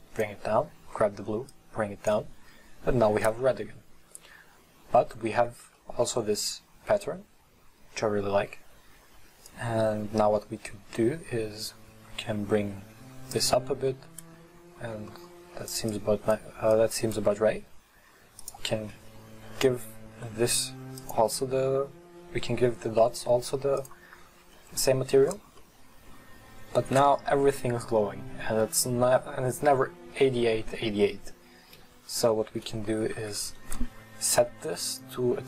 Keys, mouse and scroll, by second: 4.7 scroll up 1, 5.3 scroll down 1, 5.9-9.7 middle drag, 9.7-12.6 drag, 15.9 click, 16.8 click, 18.5 right click, 19.2-21.6 scroll down 1, 21.6-24.0 drag, 24.6-31.8 middle drag, 31.8 KP_1, 32.4-34.4 scroll up 6.